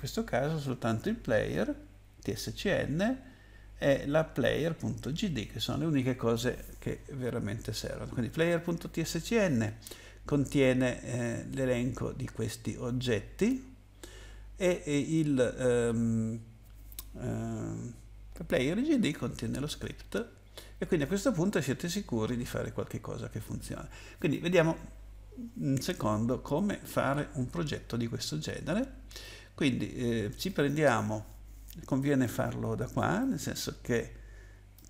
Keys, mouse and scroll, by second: 0.0 click, 4.4 ctrl+click, 24.2 click, 29.1 click, 30.4 right click, 32.0 right click, 34.7 right click.